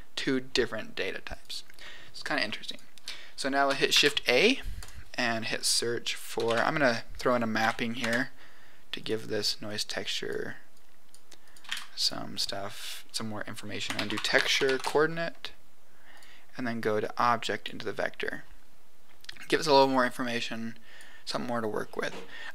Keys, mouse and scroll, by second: 1.2 click, 2.6 click, 3.9 shift+a, 9.6 click, 10.7 click, 11.4 click, 11.6 shift+a, 17.0 click, 20.5 click.